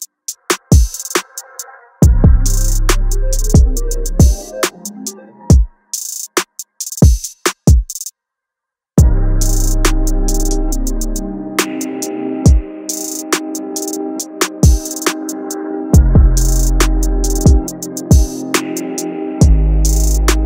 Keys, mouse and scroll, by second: 2.1-14.2 drag.